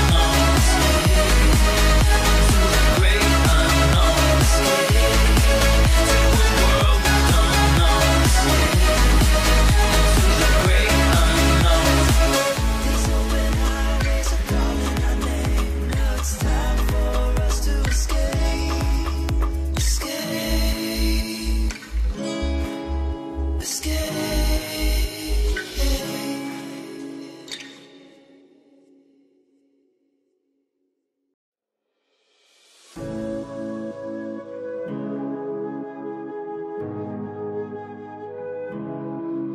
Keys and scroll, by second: 6.2 BackSpace, 7.8 Return, 10.6 Tab.